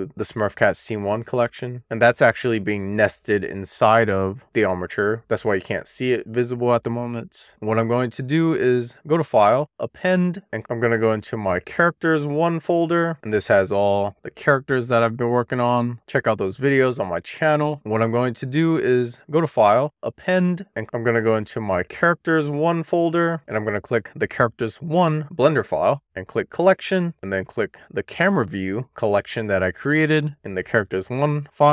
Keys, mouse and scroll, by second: 0.8 drag, 1.4 shift+click, 2.6 m, 7.5 click, 8.0-10.3 drag, 17.7 click, 18.3-20.6 drag.